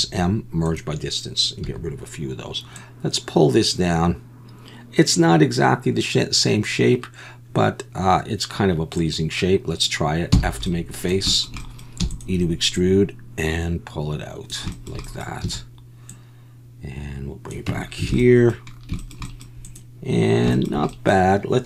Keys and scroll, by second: 1.7 a, 10.3 f, 12.0 e, 15.4 a, 17.7 Tab, 18.1 alt+a.